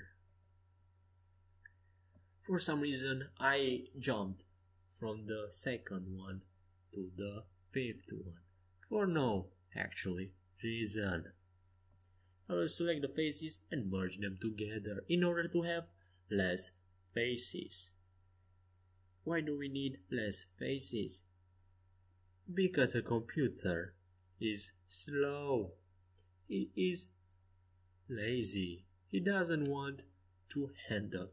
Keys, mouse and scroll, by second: 0.9-2.7 middle drag, 3.2-5.1 drag, 5.1-6.1 middle drag, 6.1-8.1 drag, 8.1-9.7 middle drag, 13.0 a, 13.3 c, 15.4 f, 16.2 a, 16.9 middle click, 18.3 c, 20.0 f, 22.2 a, 22.7 c, 25.3 f, 27.6 f, 28.1 a, 28.8 c, 30.3 f.